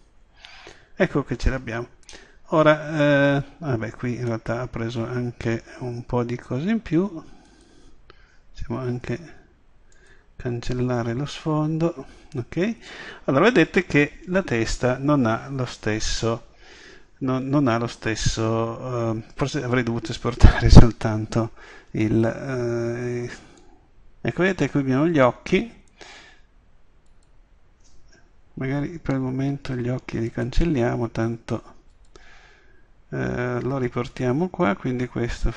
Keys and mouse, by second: 2.1 middle drag, 3.6 middle click, 3.9 middle click, 5.3-6.9 middle drag, 7.5 right click, 9.0 Delete, 12.9-22.0 middle drag, 22.0-23.6 drag, 23.6-24.2 middle drag, 24.2-25.4 drag, 27.1-28.9 drag, 29.4 Delete, 31.9 click.